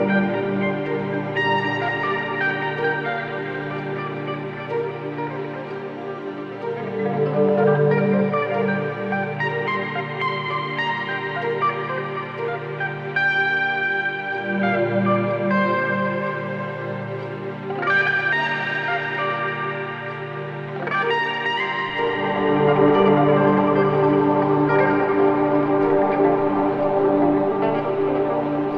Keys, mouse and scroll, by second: 2.6 click, 7.8 click, 13.5 click, 15.0 2, 17.0-17.8 typing, 17.3 click, 22.3 click, 26.3 ctrl+space, 26.3 ctrl+click, 26.6 ctrl+space, 27.5 ctrl+click, 28.5 space.